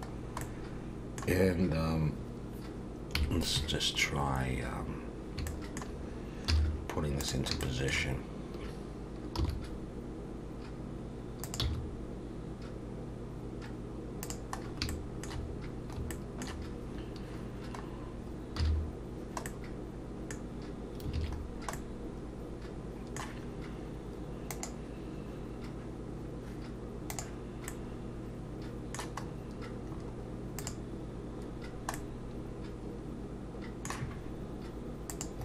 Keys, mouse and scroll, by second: 0.1-1.0 scroll down 3, 0.4 middle click, 3.2 KP_3, 5.2 scroll up 1, 5.5 shift+middle click, 6.5 z, 7.6 shift+middle click, 9.4 r, 11.6 g, 14.6 scroll up 2, 14.9 shift+middle click, 16.1 shift+middle click, 17.9-18.6 scroll down 2, 18.6-19.2 scroll down 1, 18.6 z, 19.5 middle click, 21.1 alt+a, 21.4 scroll down 2, 21.7 middle click, 27.7 middle click, 29.3 scroll up 2, 29.9-30.6 scroll up 4, 30.6 click, 31.4-31.9 scroll down 2, 31.9 middle click, 35.1 click.